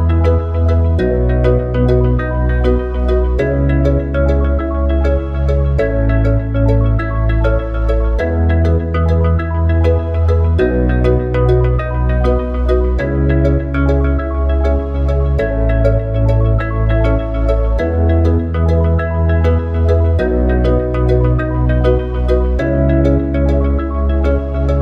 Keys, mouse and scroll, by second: 2.1 click, 2.3-5.5 drag, 8.1 click, 8.3-11.4 drag, 21.1 click.